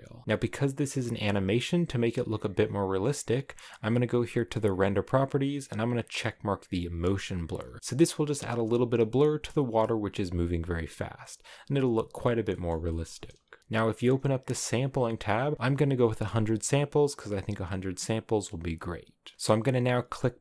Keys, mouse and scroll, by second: 6.0-7.7 drag, 7.7 shift+middle click, 7.9-8.6 scroll up 4, 8.6-9.7 scroll up 1, 9.7-10.3 scroll up 1, 10.3-12.4 scroll up 1, 17.8-20.4 drag.